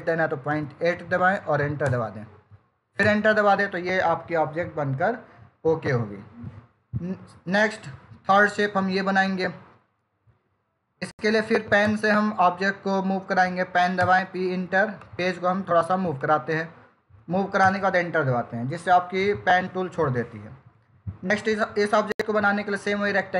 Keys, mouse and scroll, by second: 1.7 Return, 12.1 p, 13.8 Return, 15.7 click, 17.5 Return.